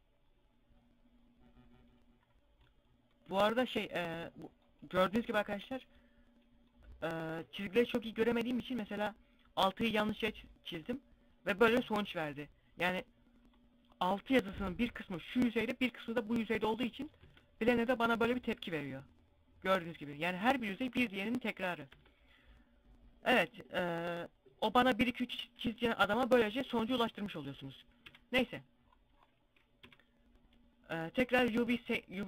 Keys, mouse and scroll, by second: 1.8 middle click, 9.6 click, 12.9-13.2 scroll up 2, 16.3 middle click, 16.3 scroll up 2, 16.6 Tab, 16.9-17.2 scroll up 1, 17.2 middle click, 19.6-20.0 scroll down 2, 19.8 scroll up 1, 20.1-21.1 scroll down 3, 20.4 Tab, 21.1 scroll up 1, 21.2 Tab, 21.4 middle click, 27.4 KP_Divide, 27.7 scroll down 1, 29.2 KP_Divide, 29.2 scroll down 5, 30.6 click.